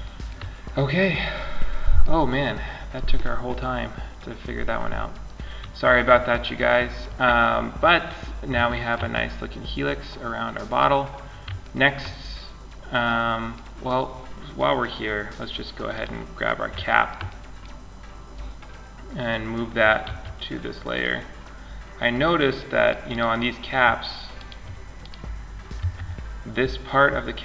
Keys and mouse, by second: 7.5-7.9 middle drag, 12.1-14.5 middle drag, 14.5-16.7 drag, 15.1-16.7 right drag, 16.1-16.5 middle drag, 16.7 middle click, 17.4-19.2 right drag, 19.2 m, 21.7-22.6 drag, 22.3 right click, 22.6-23.9 middle drag, 25.1 Tab.